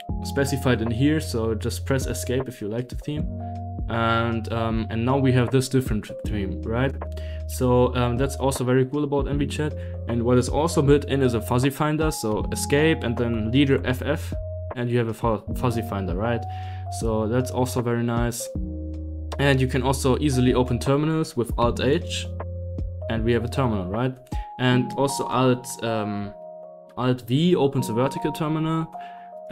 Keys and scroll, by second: 1.8-3.4 typing, 3.5 Down, 3.8 Down, 4.1 Down, 4.3 Up, 4.6 Up, 4.9 Up, 5.4-7.4 typing, 7.7 Up, 8.3 Up, 8.9 Down, 12.2 Escape, 13.2 space, 13.7 f, 13.8 f, 16.3 typing, 18.4 Escape, 18.6 Escape, 19.4 i, 19.6 Right, 20.6 Escape, 21.5 alt+h, 25.1 alt+h, 25.2 alt+t, 26.1 Escape, 26.4 Escape, 26.9 alt+v, 28.6-29.5 typing.